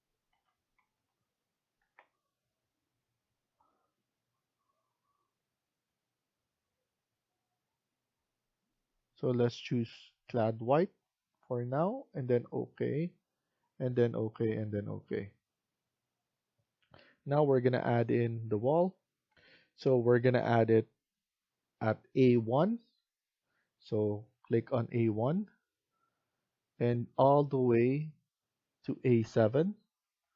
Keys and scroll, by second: 0.0-1.7 typing, 19.2 F1.